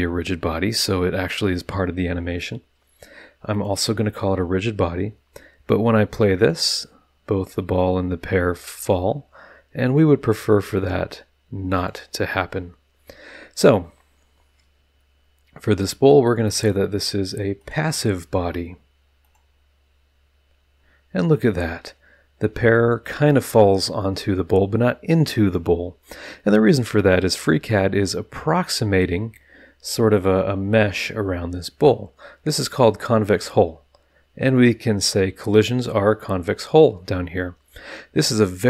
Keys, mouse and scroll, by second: 3.5 click, 6.4 click, 8.6 click, 9.8 click, 10.7 click, 11.7 click, 16.6 click, 17.6 click, 19.2 click, 25.4 click, 27.0 click, 30.8 scroll up 1, 31.5 scroll up 1, 31.6 middle drag.